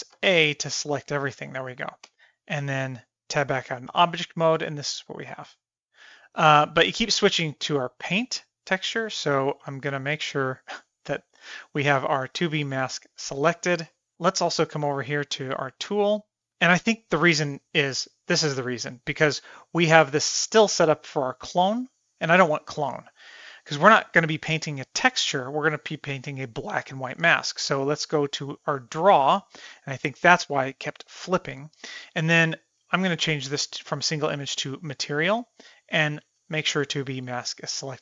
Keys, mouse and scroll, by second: 0.1 a, 2.1 Tab, 10.3 click, 15.4 click, 29.0 click, 31.7-34.6 drag, 35.9 click.